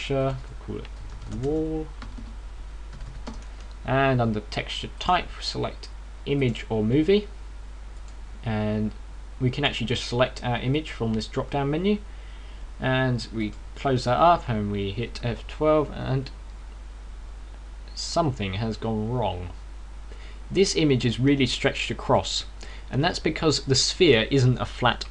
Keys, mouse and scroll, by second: 0.3 click, 0.6 click, 1.0 click, 5.8 click, 8.2-8.8 scroll down 1, 8.8 click, 10.4 click, 12.2 scroll down 4, 14.2 click.